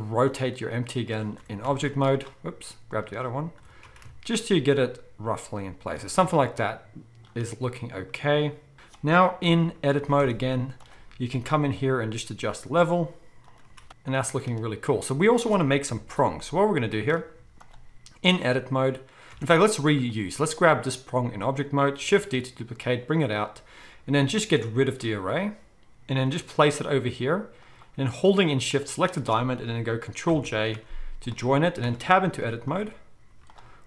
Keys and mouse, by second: 1.4 r, 2.9 click, 3.6 r, 5.9-10.0 shift+middle drag, 8.7 alt+a, 9.4 KP_1, 10.2 Tab, 10.5-12.4 middle drag, 10.5 z, 11.6 g, 13.9 z, 15.9 KP_7, 17.4 z, 19.3 Tab, 19.3-24.9 middle drag, 22.2 shift+d, 24.9-27.7 drag, 26.2 g, 27.7-28.7 middle drag, 28.7 shift+click, 28.8-33.5 shift+middle drag, 30.3 ctrl+j, 31.8 Tab, 32.4 z, 33.3 z, 33.5-33.8 drag.